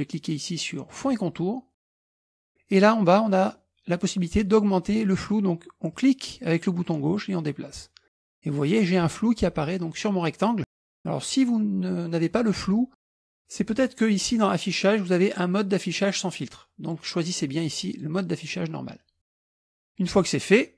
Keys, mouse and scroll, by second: 0.9 click, 6.0-9.2 drag, 13.8 click, 17.9 click.